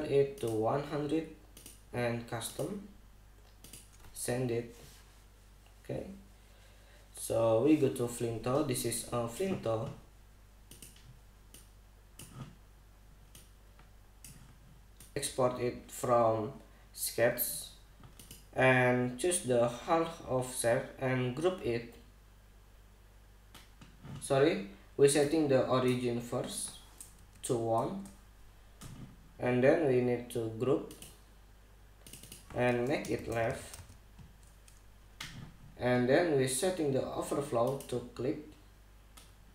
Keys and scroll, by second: 15.2 super+=, 27.8 l, 28.4 Return, 33.6-34.9 typing.